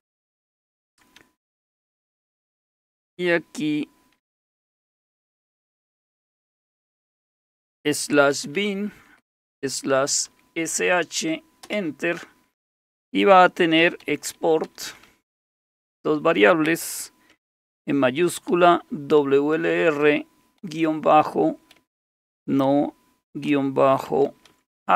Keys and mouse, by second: 1.2-1.9 typing, 5.3 typing, 6.5-10.8 typing, 11.6 Return, 13.6-15.8 typing, 18.3-19.6 typing, 20.6-24.9 typing.